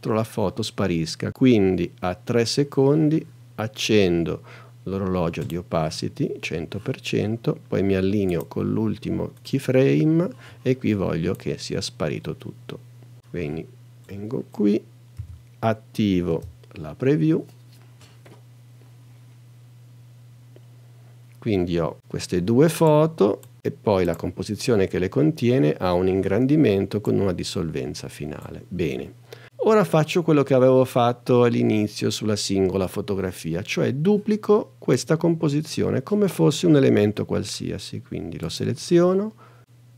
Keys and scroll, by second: 15.2 n, 16.3 space.